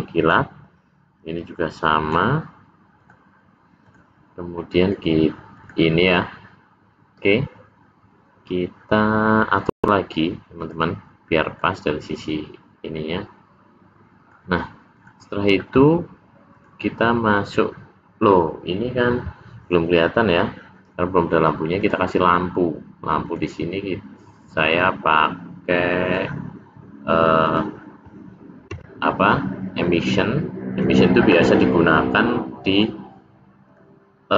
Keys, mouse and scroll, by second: 1.4 click, 3.0 click, 3.9 click, 5.6 click, 9.6 click, 10.5 click, 11.5 middle click, 14.9 click, 17.0 click, 21.7 click, 24.7 click, 27.4 click, 28.6 s, 32.6 click, 33.6 click.